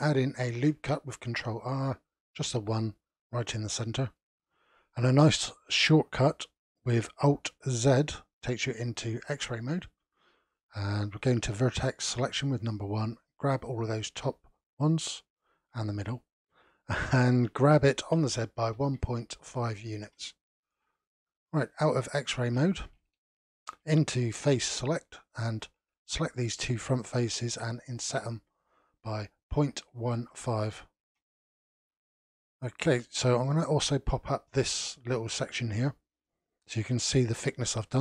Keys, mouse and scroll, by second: 0.5 ctrl+r, 3.4-6.4 middle drag, 8.0 alt+z, 11.3 1, 12.5 click, 17.5 g, 21.2-22.2 scroll down 1, 22.2 alt+z, 23.1-24.5 shift+middle drag, 24.5 3, 25.5 click, 26.0 shift+click, 27.9 i, 32.2-34.7 middle drag, 34.7 click.